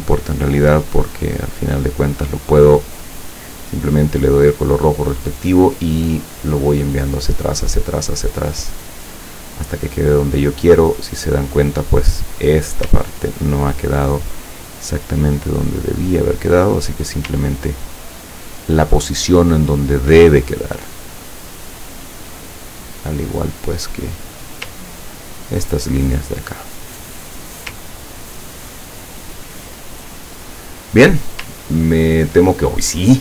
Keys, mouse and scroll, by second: 0.4 click, 0.8 click, 2.0 click, 3.9 click, 4.2 click, 5.5 click, 6.4 click, 6.7 click, 7.2 click, 7.6 click, 8.1 click, 10.9 click, 11.7 click, 12.4 click, 13.2-13.7 ctrl+scroll up 2, 14.9-17.0 drag, 17.4-17.9 ctrl+scroll down 2, 18.2-19.3 ctrl+middle drag, 20.5 click, 25.0-25.5 ctrl+scroll down 4, 26.5 click, 27.0 click, 27.9 ctrl+scroll down 1, 29.0 ctrl+scroll down 1, 30.1-31.2 ctrl+drag, 31.8 ctrl+scroll down 1.